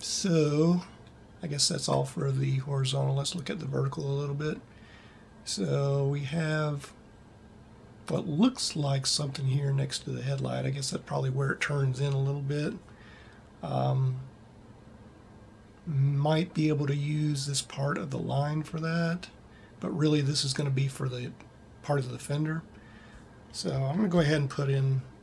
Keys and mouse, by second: 24.7 ctrl+r.